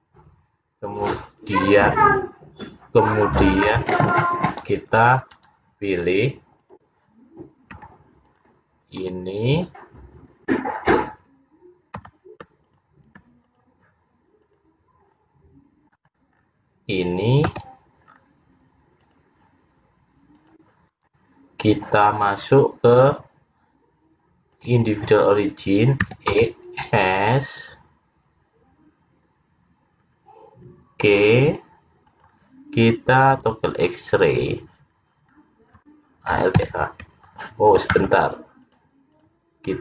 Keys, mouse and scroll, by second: 3.7 c, 6.7 click, 7.8 c, 12.1 c, 16.5-17.3 scroll down 4, 17.6 c, 23.0 click, 26.1 e, 33.4 click, 35.4 scroll down 1, 36.6 alt+h, 38.7 click.